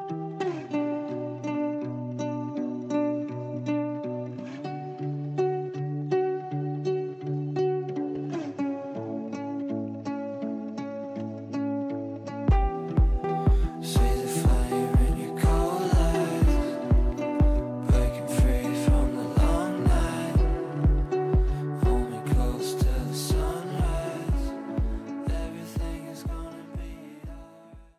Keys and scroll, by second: 5.5 g, 10.1 g.